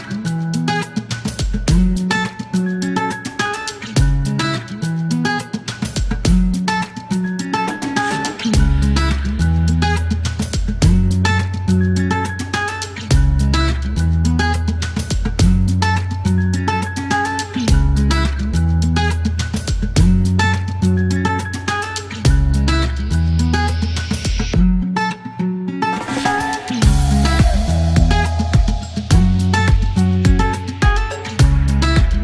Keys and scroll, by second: 0.3 KP_2, 0.4 Return, 3.7-6.0 typing, 11.9 alt+q, 13.5 typing, 15.1 KP_2, 15.1 KP_4, 15.2 Return, 16.2 alt+e, 16.7 typing, 22.4 ctrl+a, 22.6 ctrl+t, 23.7 ctrl+a, 26.1 e, 28.5 ctrl+r, 29.2 typing, 30.2 alt+u, 30.6-32.2 typing.